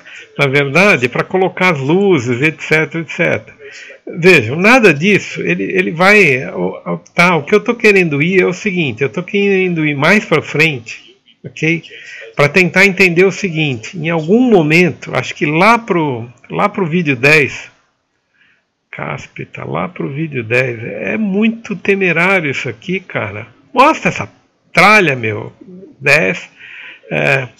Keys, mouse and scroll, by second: 0.0-1.1 typing, 0.0 right click, 1.3 click, 2.1 ctrl+v, 2.3 click, 3.4 Tab, 3.8 click, 4.0 d, 4.2-5.8 drag, 7.2-8.5 typing, 9.4 click, 10.3-11.1 typing, 12.4 Caps_Lock, 12.4 right click, 12.9-13.3 scroll up 1, 13.6-14.7 scroll down 1, 26.2 right click.